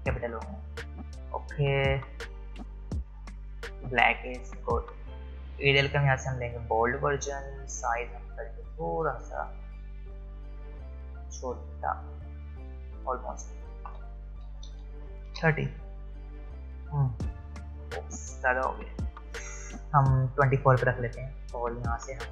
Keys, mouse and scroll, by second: 5.5 click, 11.0 click, 13.8 click, 15.3 Return, 18.5 click.